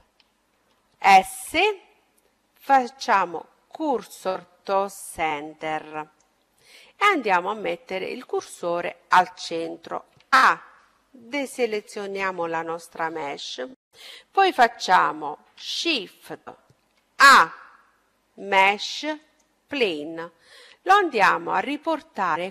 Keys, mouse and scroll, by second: 10.2 a, 17.0 shift+a, 20.5-22.3 middle drag.